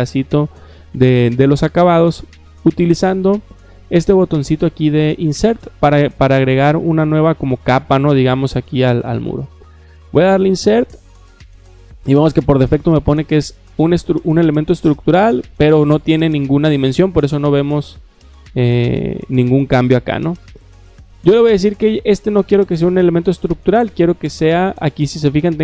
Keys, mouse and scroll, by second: 10.3 click, 21.1 click, 23.1 click.